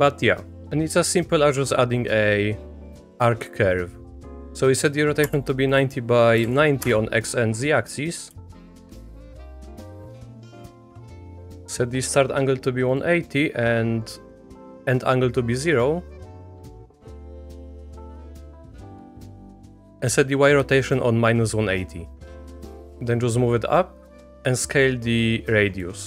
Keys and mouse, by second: 0.6 Delete, 0.6 Escape, 0.6 Tab, 0.6 shift+drag, 0.6 x, 1.1 shift+a, 4.3 click, 5.7-6.9 drag, 8.6 shift+click, 9.0 click, 9.6 click, 10.7 click, 13.0-14.5 drag, 17.2 shift+middle click, 18.7-20.5 drag, 22.6-24.1 drag, 24.6-25.9 drag.